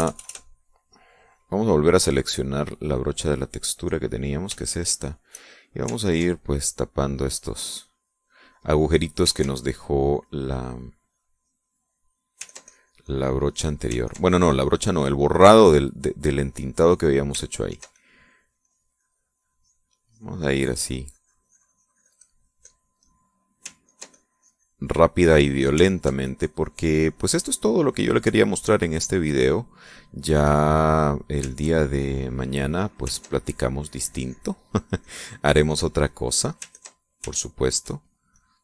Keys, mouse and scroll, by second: 0.6 KP_Add, 1.1 middle click, 2.7 click, 3.2 click, 4.5 click, 5.2 shift+click, 6.7-12.9 ctrl+drag, 13.1-14.5 ctrl+drag, 14.7-17.9 ctrl+drag, 18.3-23.6 ctrl+drag, 23.7 middle click, 24.5-26.5 ctrl+drag, 26.6-28.6 ctrl+drag, 28.9 click, 29.8 middle click, 31.0 click, 32.1-33.7 ctrl+drag, 33.8-35.6 ctrl+drag, 35.7-37.2 drag, 37.4 ctrl+click, 38.0 ctrl+click.